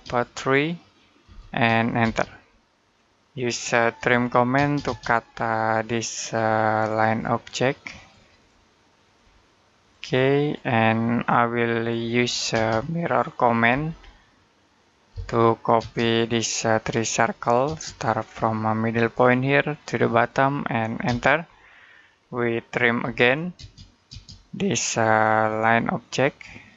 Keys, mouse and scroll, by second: 1.0 3, 1.8 space, 3.8-4.4 typing, 5.1-6.1 scroll up 1, 6.1 click, 12.0-12.3 scroll down 1, 12.3 space, 12.6 middle click, 13.2 scroll down 1, 13.4 scroll up 1, 13.5 typing, 14.9-15.6 typing, 16.1 click, 17.5 space, 19.1 click, 20.9 space, 21.3 middle click, 22.0-22.9 scroll up 1, 22.9-23.4 typing, 25.4 click.